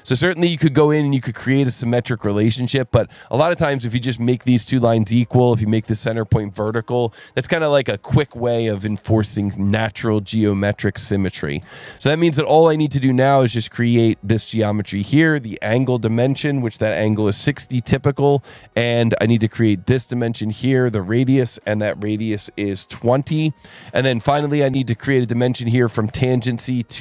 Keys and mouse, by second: 3.7 click, 10.8 click, 11.6 s, 12.4 click, 13.6 click, 14.3 click, 15.3 click, 17.2 KP_6, 17.5 KP_Enter, 17.5 KP_0, 19.6 click, 20.6 click, 23.0 KP_2, 23.1 KP_0, 23.3 KP_Enter.